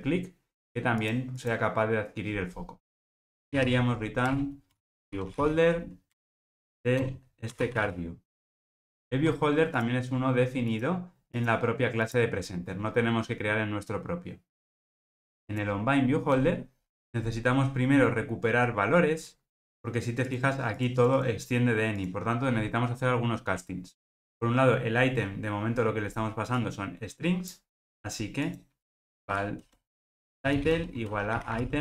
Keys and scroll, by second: 4.3 Return, 9.8 super+b, 14.7 alt+super+[.